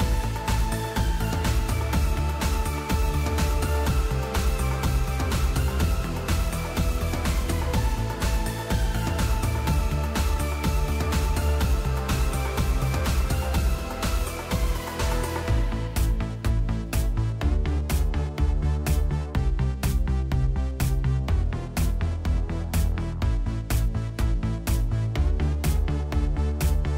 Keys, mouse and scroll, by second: 2.1 s, 2.2 Return, 11.3 Caps_Lock, 11.5 Up, 11.6 Up, 15.7 Return, 17.4 Up, 17.6 Up, 17.9 Up, 18.5 Up, 19.0 Down, 20.3-21.8 typing, 23.0-26.6 typing.